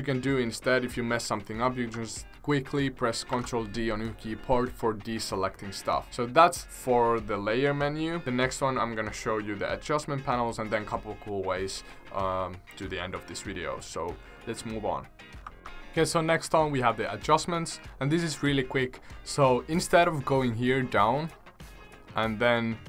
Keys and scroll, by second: 3.3 ctrl+d.